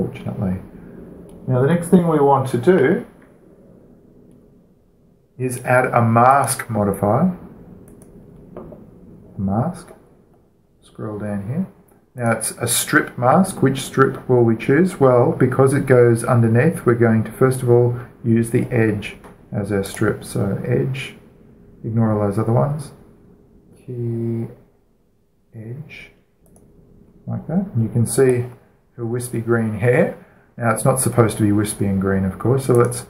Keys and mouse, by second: 0.3-6.2 middle drag, 7.1-8.1 drag, 9.2-10.5 drag, 11.0-13.0 middle drag, 13.0-14.9 drag, 20.7-22.5 drag, 27.3-29.0 drag, 29.1 click, 29.3-31.8 middle drag, 32.8-33.0 middle drag.